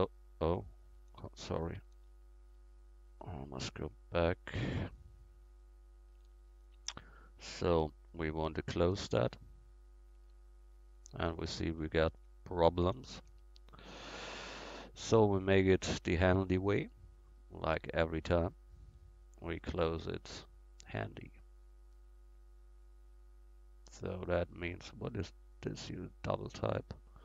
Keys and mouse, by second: 1.4 ctrl+y, 2.1 ctrl+y, 2.6 ctrl+y, 6.2 ctrl+z, 9.3 f, 10.2 f, 11.3 ctrl+z, 11.9 ctrl+z, 13.3 a.